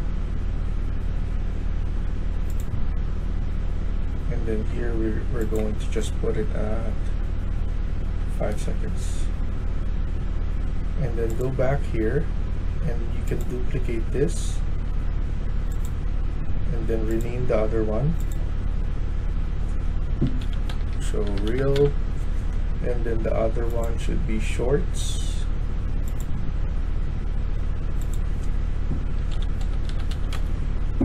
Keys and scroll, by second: 8.2 5, 8.4 Return, 12.3 typing, 19.9-22.1 typing, 28.9-30.7 typing.